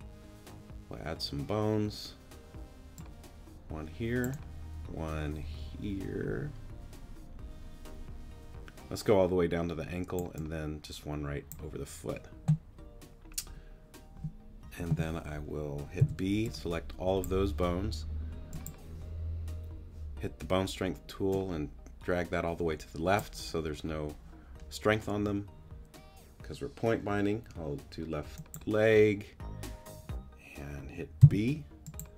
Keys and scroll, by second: 16.0 b, 31.2 b.